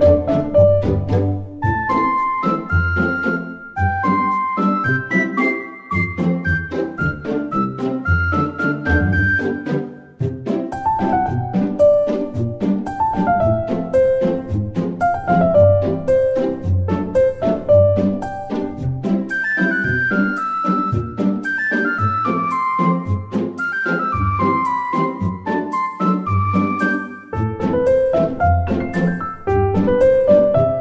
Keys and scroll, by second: 5.2 Delete, 5.6 ctrl+shift+c, 5.7 ctrl+v, 12.7-14.7 typing, 13.3 Return, 14.8 Return, 16.0 1, 16.4 Return, 18.3-20.9 typing, 23.5 2, 23.5 Return, 24.2 2, 25.2 Return.